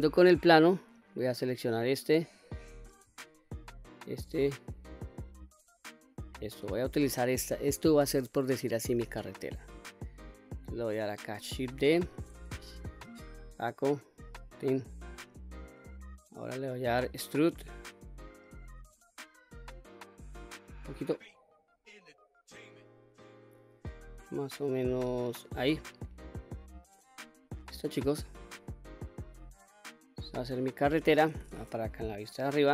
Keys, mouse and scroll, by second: 0.3 click, 3.0 alt+click, 4.8 alt+shift+click, 10.3-11.0 middle drag, 11.7 shift+d, 13.2-14.9 right drag, 14.9 scroll up 2, 15.5 middle click, 18.5 e, 25.2 click, 25.8-26.6 middle drag, 27.0-27.4 scroll down 1, 27.4-31.0 middle drag, 31.7 KP_7, 32.3-32.7 scroll up 1.